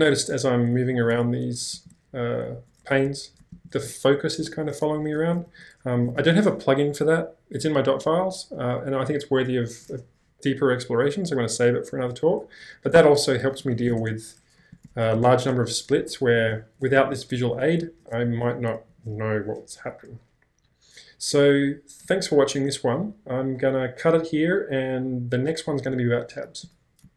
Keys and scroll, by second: 0.1 ctrl+h, 0.9 ctrl+l, 1.6 BackSpace, 1.7 ctrl+j, 2.5 ctrl+k, 3.0 ctrl+h, 3.5 ctrl+l, 5.5 ctrl+j, 6.2 ctrl+h, 12.6-14.7 typing, 16.0 ctrl+k, 16.4 ctrl+l, 17.0 ctrl+j, 17.5 ctrl+h, 17.9 ctrl+k, 18.2 ctrl+h, 18.9 ctrl+l.